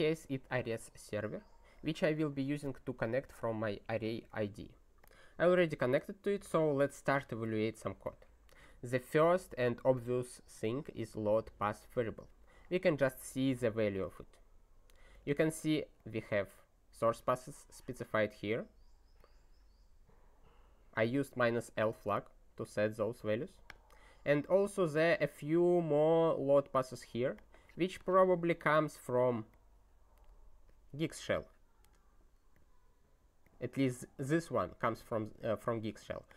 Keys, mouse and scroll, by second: 5.0 click, 6.4 ctrl+n, 7.3 ctrl+e, 12.0 ctrl+e, 19.2 click, 20.9 click, 29.5 click, 30.6 click.